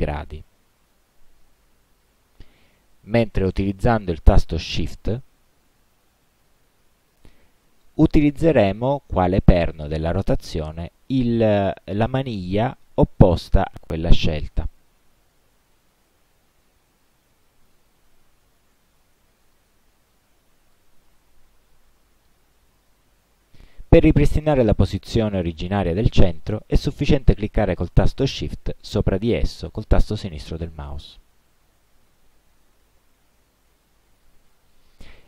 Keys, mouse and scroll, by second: 4.8 click, 6.1 click, 7.5-14.7 shift+drag, 15.1 ctrl+z, 16.1-18.0 shift+drag, 18.1 ctrl+shift+z, 19.6-21.0 shift+drag, 21.2 ctrl+shift+z, 30.5 shift+click.